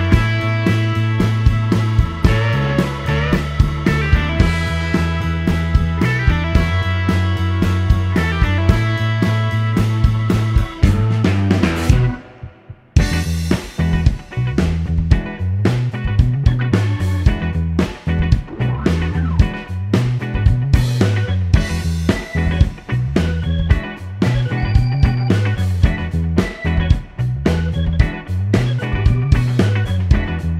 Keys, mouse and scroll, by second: 5.2 shift+scroll down 1, 5.4 middle click, 6.0-6.5 scroll down 1, 11.1 shift+click, 15.0 click, 16.7 click, 19.0 click, 20.8 click, 21.7 click, 22.7 middle click, 23.0-23.4 scroll up 1, 23.4 scroll down 1, 23.5-24.8 middle drag, 26.4 click, 27.3 click, 28.1 click, 29.5 click.